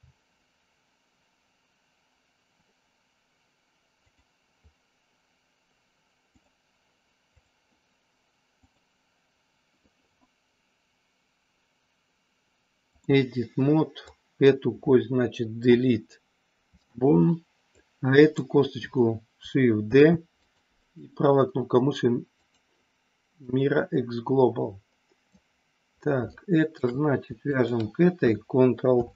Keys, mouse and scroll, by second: 4.0 click, 6.3 click, 7.4 click, 8.5-13.1 drag, 14.1 click, 15.6 Delete, 17.7 click, 19.7 shift+d, 20.4 click, 20.9-22.6 right drag, 23.4-25.3 drag, 26.3 shift+middle click, 28.9 ctrl+p.